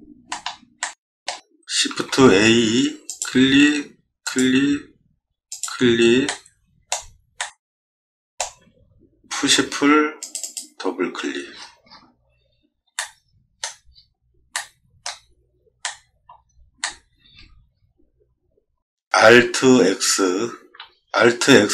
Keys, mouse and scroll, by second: 0.2 middle click, 0.8 shift+middle click, 1.9 shift+a, 3.1 click, 4.2 click, 5.5 click, 6.2 middle click, 7.4 middle click, 9.4 p, 10.2 click, 10.4 click, 11.5 middle click, 11.8 middle click, 12.9 shift+middle click, 13.9 scroll up 1, 14.5 middle click, 15.8 middle click, 16.3 scroll down 1, 16.8 shift+middle click, 17.4 middle click, 18.3 middle click, 18.4 middle click, 20.5 alt+x.